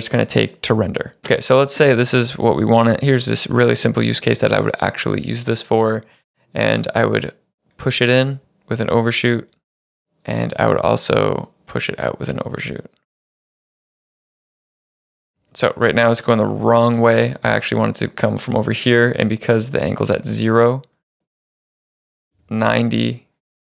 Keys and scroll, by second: 2.9 =, 13.9 space, 15.4 space, 22.1 9, 22.3 Return.